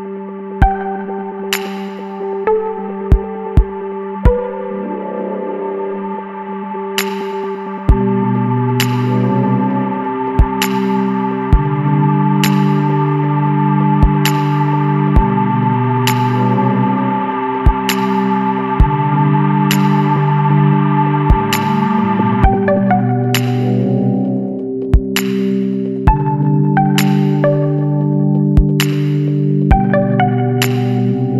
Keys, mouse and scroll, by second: 0.7-2.1 drag, 2.3 scroll down 2, 4.8 click, 6.4 KP_1, 6.7 KP_5, 9.3 click, 10.5-11.0 scroll down 1, 12.4-14.9 drag, 20.9 ctrl+click, 21.9 ctrl+click, 23.4 ctrl+click, 26.2 click, 28.4 click, 29.8 KP_5.